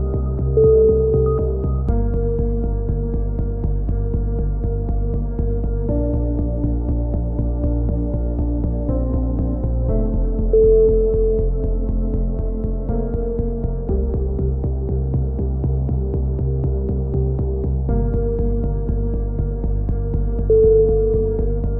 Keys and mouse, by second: 2.1 z, 2.6 ctrl+r, 4.9-5.5 drag, 5.2 g, 6.1 a, 6.2 z, 7.1 z, 9.4-10.4 right drag, 9.4 g, 11.3 z, 11.5 a, 11.6-12.1 drag, 16.3-18.0 drag, 17.4-18.6 right drag, 18.6 a, 18.9 middle drag, 19.1 click.